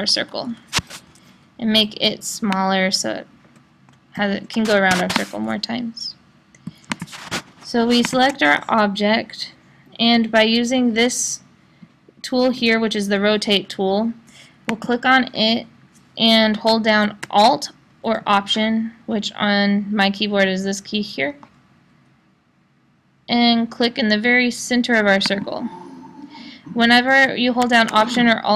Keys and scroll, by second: 0.0 Down.